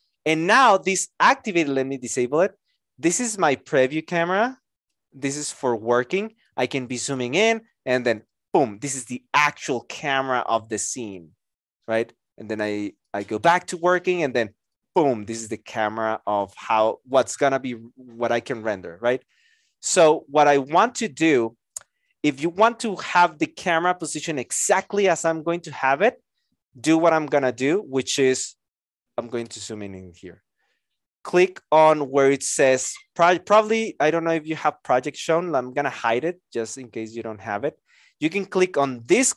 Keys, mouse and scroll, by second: 5.3 alt+right click, 6.3 alt+click.